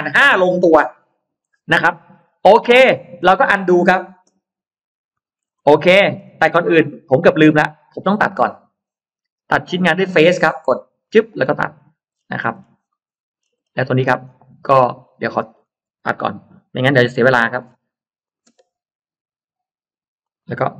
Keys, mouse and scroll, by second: 2.0-3.8 scroll down 3, 2.8 middle click, 5.0 ctrl+z, 5.4-6.4 scroll up 2, 5.5 middle click, 5.9 space, 6.5-6.8 scroll down 1, 7.0 click, 7.5-8.4 scroll up 3, 9.9 click, 10.9 click, 11.6 click, 12.0-13.7 scroll down 7, 12.9 middle click, 14.0-15.7 scroll up 6, 16.6 r, 17.0 Down, 17.2 click, 17.4-17.8 scroll down 2, 18.3 space, 20.1 click.